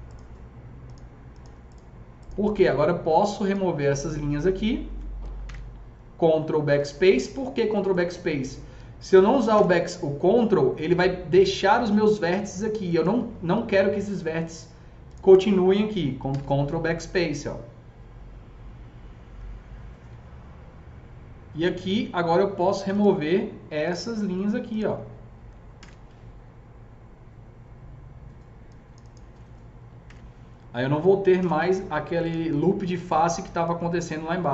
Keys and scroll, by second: 5.4 ctrl+BackSpace, 9.5 ctrl+BackSpace, 16.2 ctrl+BackSpace, 25.6 ctrl+BackSpace, 29.9 ctrl+BackSpace, 31.3 ctrl+BackSpace.